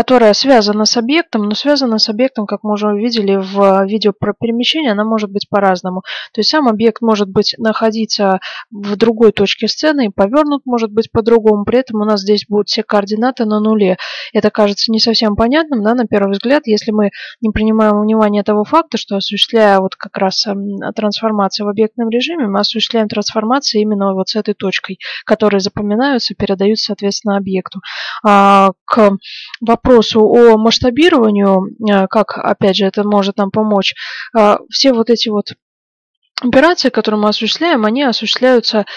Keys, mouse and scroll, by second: 34.5 s.